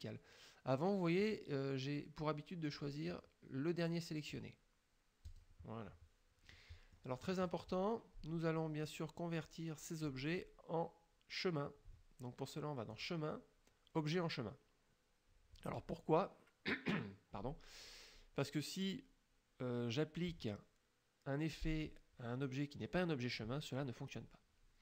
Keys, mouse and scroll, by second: 1.3 click, 4.4 click, 5.3 click, 6.6 click, 13.0 click.